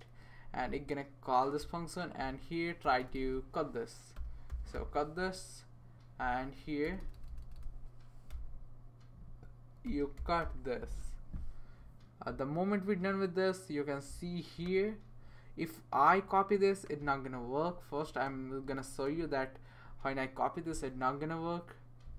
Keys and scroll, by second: 2.8-5.2 typing, 6.8-7.5 typing, 9.6-10.9 typing.